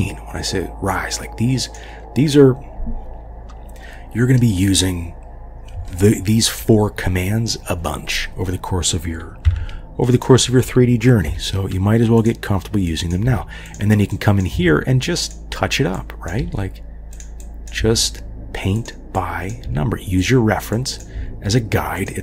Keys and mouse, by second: 6.0-6.6 shift+drag, 9.5 1, 10.1 click, 11.3 g, 13.0 click, 13.2 g, 14.2 click, 14.6 g, 16.1-17.2 drag, 16.4 g, 17.4 click, 17.8 g, 19.1 click, 19.7 g, 20.9 click, 21.1 g.